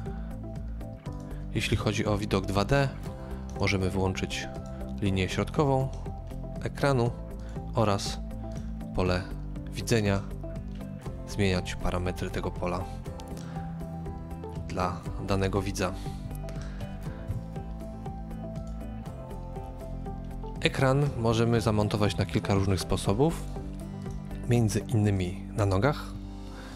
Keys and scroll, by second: 1.7 KP_0, 17.3 KP_3.